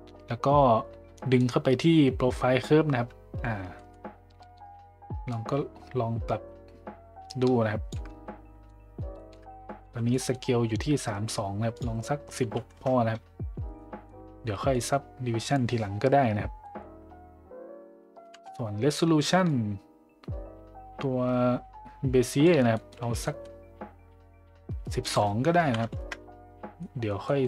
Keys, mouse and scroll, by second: 1.4-2.6 drag, 3.7 middle click, 5.3-7.9 shift+drag, 8.2-8.7 middle drag, 9.1 shift+middle drag, 10.1 middle drag, 10.1 z, 11.7-13.1 drag, 13.7 middle drag, 14.7 middle drag, 16.7 middle click, 19.4-22.5 shift+drag, 22.7 middle drag, 23.2 middle drag, 25.0-26.5 drag, 26.8 middle click, 27.2 middle click.